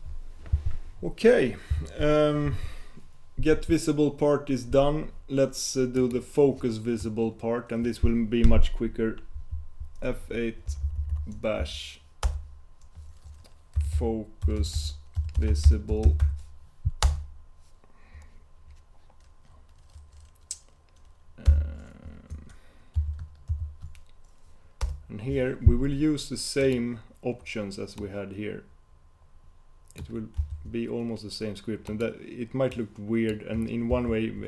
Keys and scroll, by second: 9.7 F8.